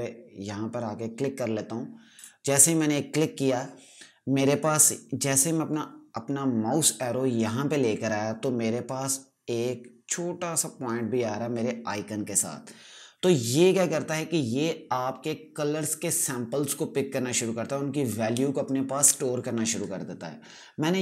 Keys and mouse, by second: 2.0 click.